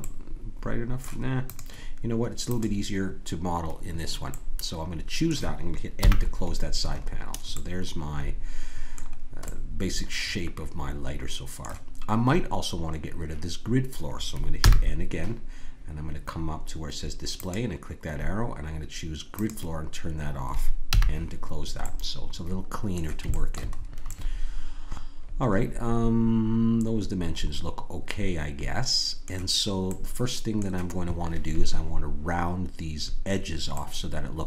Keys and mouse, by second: 0.0-1.5 middle drag, 1.5-3.3 drag, 4.3-6.0 middle drag, 6.0 n, 9.7-12.9 middle drag, 14.6 n, 17.3-19.2 drag, 19.4-24.4 drag, 20.9 n, 24.4-26.0 middle drag, 29.9-34.4 middle drag.